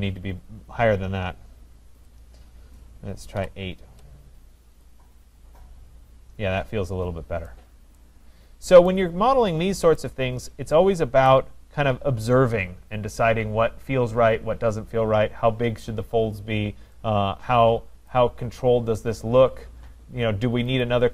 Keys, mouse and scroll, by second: 2.1 click, 3.4 8, 3.8 Return, 4.9 click, 5.8-6.6 scroll, 6.6-7.2 scroll, 8.1 right click, 8.5-8.8 scroll, 10.0 right click, 10.4 scroll, 11.5 right click, 11.8-13.0 scroll, 18.2 right click, 20.8 click.